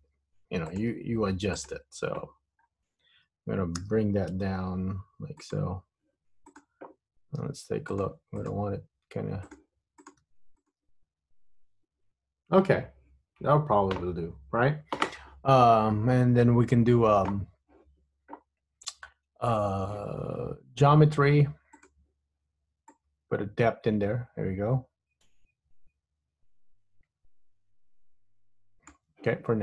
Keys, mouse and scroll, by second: 0.2 g, 1.7 click, 2.7 scroll down 2, 3.8 g, 6.6 click, 7.6 g, 8.5 click, 8.7 g, 10.1 click, 10.4 g, 11.7 Tab, 15.6-16.1 scroll up 3, 16.1-16.8 scroll down 2, 21.9 click, 23.0 click.